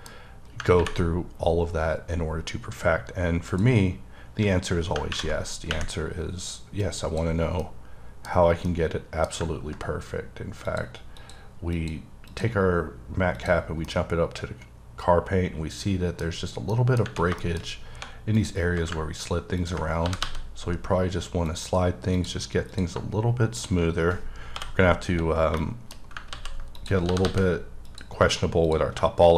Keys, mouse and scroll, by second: 3.5 click, 6.8 click, 7.6 middle click, 8.3-10.7 scroll down 6, 8.7 middle click, 10.7 click, 11.2 click, 11.8 click, 12.3 click, 13.4 click, 13.9 middle click, 16.3-16.7 scroll up 3, 16.7 middle click, 17.4 shift+middle click, 17.6-18.0 scroll up 1, 18.0 1, 18.4 click, 19.7 ctrl+click, 20.1 g, 20.3 g, 21.5 click, 22.2 click, 22.7 click, 22.9 shift+click, 23.6 shift+click, 24.6 j, 24.9-25.5 scroll up 1, 25.5 shift+scroll up 1, 25.6 shift+middle click, 26.2 middle click, 26.3 ctrl+middle click, 26.6 ctrl+z, 26.8 click, 27.1 g, 27.3 g, 27.9 click.